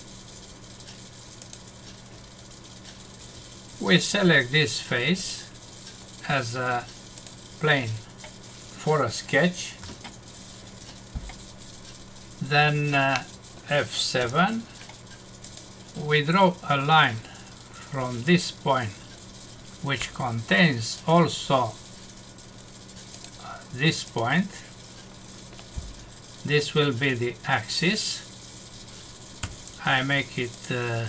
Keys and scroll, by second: 9.8 F5, 14.2 F7, 29.4 Escape.